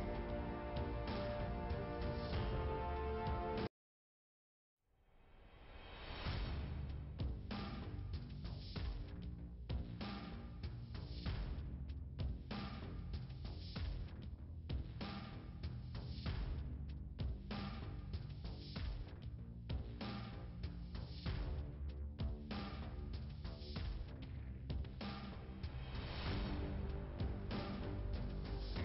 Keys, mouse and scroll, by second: 2.2 click, 3.6 click, 6.2 click, 6.8 click, 9.4 click, 11.3 click, 15.2 click, 19.1 click, 21.8 click, 24.0 click, 24.3 click, 25.3 click, 26.4 click, 26.6 click.